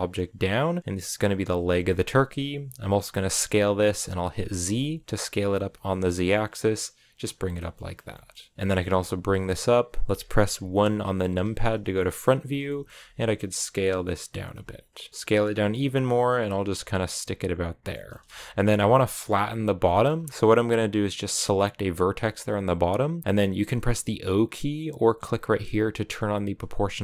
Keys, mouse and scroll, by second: 1.2 scroll down 3, 1.5-3.2 middle drag, 3.2 s, 7.3-8.5 shift+middle drag, 8.5 g, 11.1 KP_1, 11.8 shift+middle click, 12.2 scroll up 1, 12.4 scroll down 1, 12.5 shift+middle click, 13.0 s, 14.4 g, 15.1 s, 15.6 g, 17.7 shift+middle click, 18.1 g, 18.5-19.7 scroll up 1, 19.7 shift+middle click, 19.9-21.4 scroll up 2, 21.4 right click, 25.9-27.0 drag.